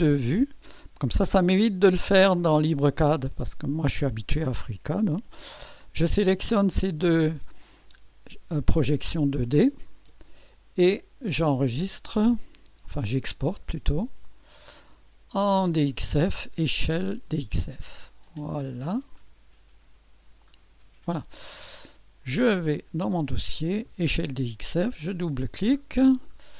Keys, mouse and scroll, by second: 9.8 ctrl+click, 12.3 click, 14.2 click, 17.1 click, 18.3 click, 19.1 click, 20.4 click, 22.4 click, 24.6 click, 25.8-26.5 scroll down 3.